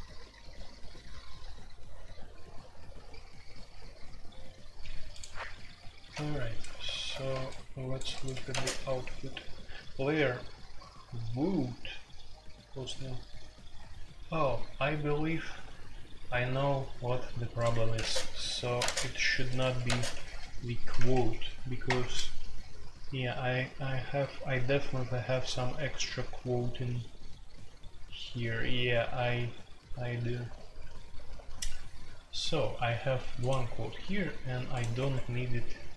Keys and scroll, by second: 8.3 Escape, 8.5 space, 8.5 Tab, 17.7 Escape, 17.9 space, 18.0 Tab, 18.7 space, 18.8 Tab, 19.6 Escape, 19.8-20.9 typing, 21.8 Return, 34.9 Escape.